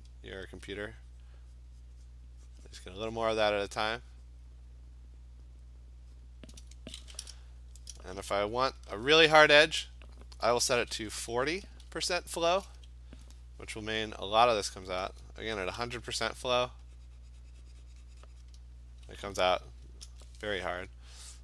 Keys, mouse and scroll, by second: 0.6-5.1 alt+click, 1.6 click, 1.9 click, 2.1 click, 2.6 click, 3.0 click, 3.2 click, 3.4 click, 4.0 click, 4.5 click, 6.3 click, 9.4 $, 10.8-11.8 typing, 14.7 alt+click, 16.1 ), 18.5 click, 20.1 ctrl+z.